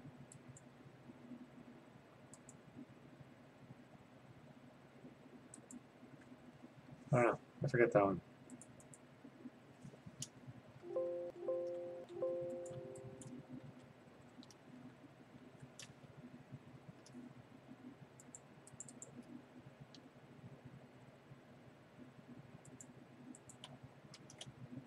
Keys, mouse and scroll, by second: 0.6 click, 2.5 click, 5.8 click, 8.7 click, 9.0 right click, 10.8 ctrl+d, 11.3 a, 12.0 ctrl+d, 12.7 click, 15.8 ctrl+s, 15.8 click, 16.3 Escape, 18.4 click, 18.9 click, 19.4 click, 21.0-22.1 scroll, 22.9 click, 23.7 click.